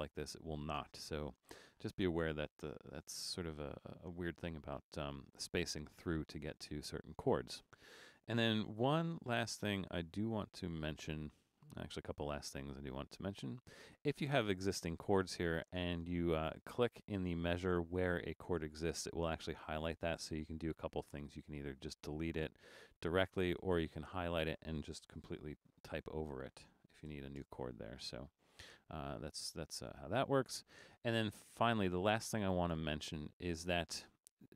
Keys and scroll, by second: 1.1 super+-, 11.1 super+=, 11.4 super+=, 21.2 BackSpace, 25.5 shift+f, 25.9 shift+3, 27.1-27.4 typing.